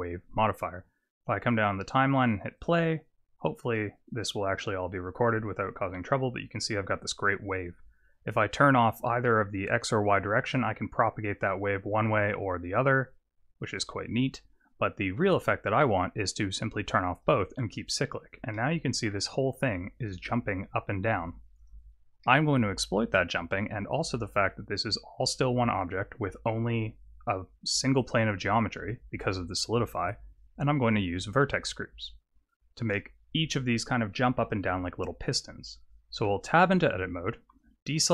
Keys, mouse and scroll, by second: 2.6 click, 10.2 click, 12.5 click, 13.0 click, 17.2 click, 18.6 middle click, 21.7 click, 22.2 middle click, 36.2 Tab.